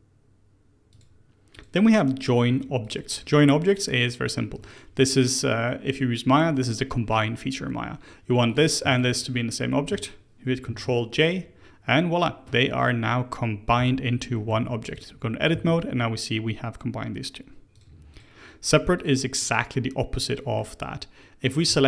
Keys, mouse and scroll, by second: 0.8 click, 1.5 click, 2.0-2.4 scroll down 2, 2.4 Tab, 2.7 click, 3.1-4.6 middle drag, 4.6 shift+click, 5.0-8.1 middle drag, 8.4 click, 8.8 shift+click, 10.4 ctrl+j, 13.7 n, 14.3 middle click, 14.4 Tab, 14.8 click, 15.5 a, 17.7 click, 18.0 click, 18.7 Tab, 18.9 click, 19.3-20.2 scroll up 1, 20.2-21.6 middle drag, 21.6 Tab.